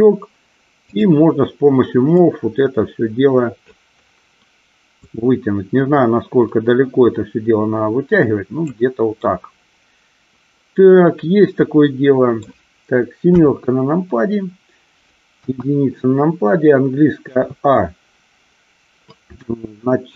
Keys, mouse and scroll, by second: 1.0 click, 2.3-3.8 drag, 5.3-8.8 drag, 9.3-12.6 middle drag, 13.4 KP_7, 15.4 KP_1, 17.3 a.